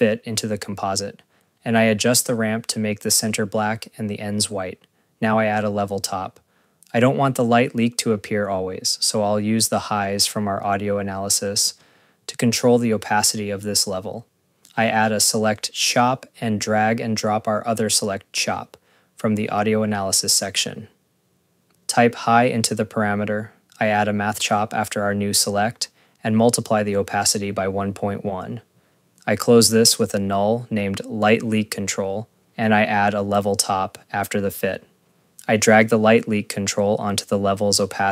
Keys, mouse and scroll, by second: 0.1 ctrl+v, 0.3 click, 1.9 click, 4.8 click, 5.4 click, 6.0 click, 6.6 click, 8.4 click, 9.4 click, 9.6 scroll, 10.4 scroll, 10.7 click, 10.7 click, 11.7 click, 12.6 Tab, 16.7 click, 17.3 click, 17.8 click, 18.1 scroll, 18.3 click, 18.6 click, 18.9 scroll, 19.3 click, 19.4 click, 20.0 scroll, 20.5 click, 20.6 click, 22.1 click, 22.9-24.4 typing, 24.8 scroll, 25.0 click, 25.2 click, 25.5 click, 26.1 click, 26.4 right click, 26.8 h, 27.2 click, 27.7 click, 28.3 ., 28.5 Return, 29.3 right click, 30.1 click, 30.3 scroll, 30.5 click, 30.6-32.3 typing, 32.1 scroll, 32.3 click, 32.5 ctrl+s, 33.6 click, 33.6 click, 34.3 right click, 34.4-35.3 typing, 35.1 click, 35.2 click, 36.1 click, 37.6 scroll, 37.9 click, 38.0 click.